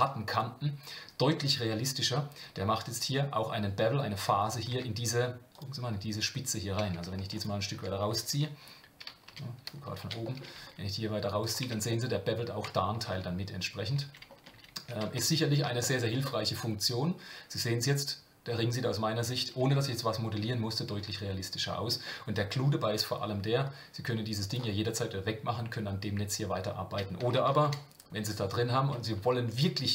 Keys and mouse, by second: 4.7 Tab, 5.5 click, 7.4 click, 9.2 KP_7, 10.2 shift+middle click, 10.6 g, 11.6 Tab, 11.9-12.4 middle drag, 14.0 ctrl+z, 15.0 Tab, 15.8 shift+middle drag, 16.2-21.9 middle drag, 27.5 ctrl+z.